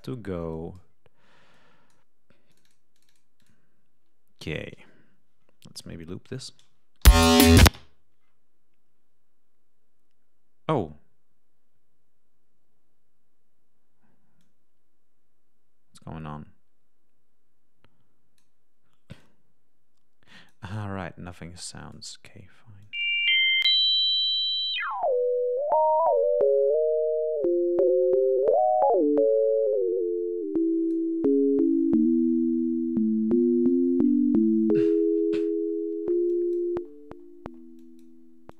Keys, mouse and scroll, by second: 0.4 click, 1.4 click, 2.4 click, 2.9 click, 3.3 click, 5.7 click, 6.9 l, 7.6 click, 14.3-18.5 drag, 19.1-20.6 drag, 21.6 click, 22.7-23.9 drag, 24.6-31.0 drag, 32.0 scroll up 2, 36.2 click, 37.7 click, 38.4-38.5 drag.